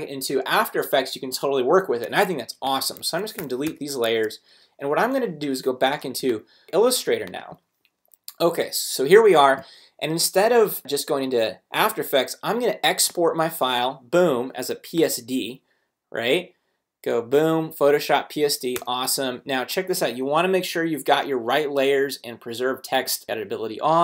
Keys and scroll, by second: 3.0 super+a, 3.4 super+BackSpace, 3.6 Return, 4.0 super+Tab, 6.0 super+space, 7.0 v, 18.7 Return.